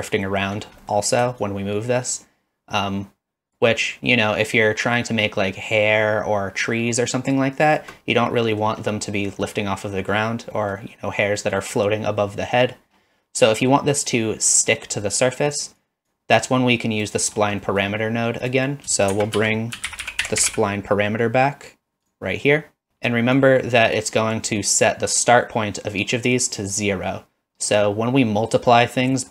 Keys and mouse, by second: 0.3 middle click, 0.9 middle drag, 1.5-7.8 shift+drag, 8.4 middle drag, 9.2 middle drag, 9.9 middle click, 10.5 middle click, 11.4 middle click, 16.0 click, 16.5 click, 17.7 middle click, 18.5 click, 19.1 shift+a, 23.5 click, 28.7 middle click.